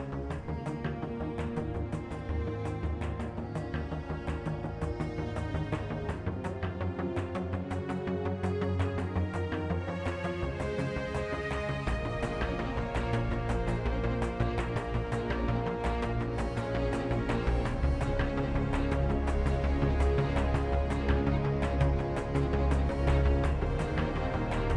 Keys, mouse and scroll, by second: 0.8 Tab, 1.5 a, 1.6 Tab, 2.0 z, 2.5 KP_1, 5.8 Tab, 5.9 right click, 14.4 f, 16.0 i, 19.6 ctrl+KP_3, 23.1 z.